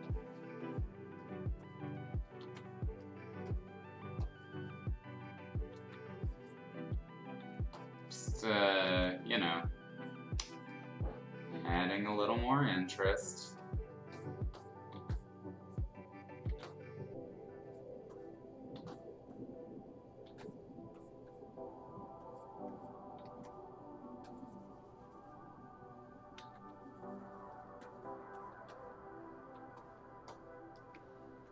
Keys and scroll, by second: 2.4 x, 5.7 ctrl+z, 8.8 ctrl+z, 11.7 x, 14.9 x, 16.4 x, 20.2 x, 23.2 x, 26.4 x.